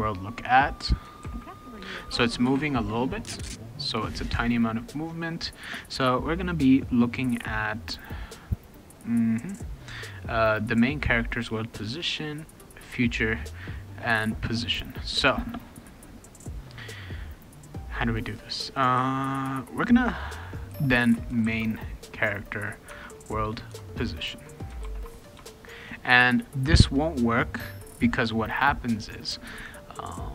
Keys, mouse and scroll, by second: 0.0 click, 1.2 ctrl+c, 2.1 click, 2.5 ctrl+v, 20.4-21.9 typing, 22.9 Tab, 23.7 Tab, 24.8 ctrl+s, 25.3 Return, 29.3 click.